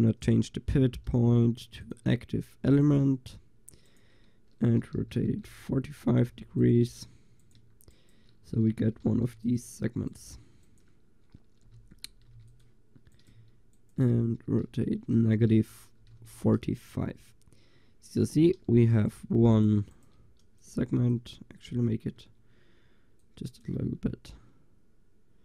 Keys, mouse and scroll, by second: 5.0 r, 8.8 r, 9.6 click, 11.7 r, 12.5 click, 13.8-16.5 drag, 14.7 r, 16.6-17.6 drag, 17.0 Tab, 17.6 middle click, 18.3 Tab, 18.7 a, 21.2 Tab, 22.3 Tab, 23.8 Tab.